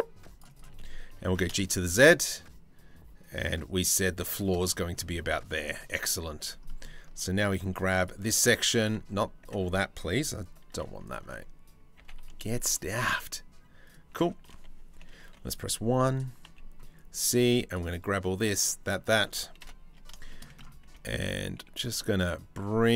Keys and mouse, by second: 0.8 g, 4.2 middle click, 5.1 middle click, 6.0 2, 6.2 middle click, 7.3 z, 9.0 1, 10.3 2, 11.6 g, 14.8 1, 15.0 click, 16.0 c, 19.2 KP_7, 19.7 shift+middle click, 20.5 g, 20.7-22.6 shift+middle drag, 22.8 z.